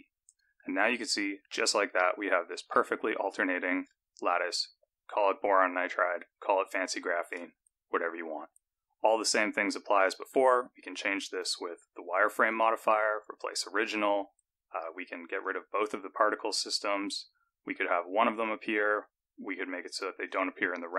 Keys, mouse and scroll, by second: 0.4 click, 1.0-1.8 scroll up 6, 2.0 shift+middle click, 3.2 scroll down 2, 3.4-3.9 scroll up 1, 5.8-6.3 scroll down 2, 6.7-7.4 scroll down 1, 8.4-10.1 scroll down 2, 10.1 click, 11.4 click, 13.1 click, 15.9 click, 16.5 click, 18.9 click, 20.5 click.